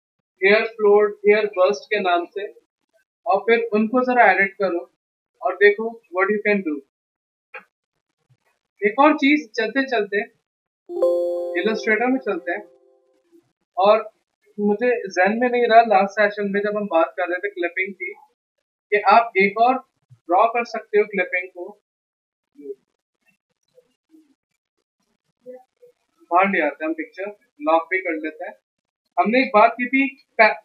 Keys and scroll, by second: 9.2 f, 9.8 f, 14.6 f, 19.1 alt+Tab, 23.7 Tab, 27.4 ctrl+2.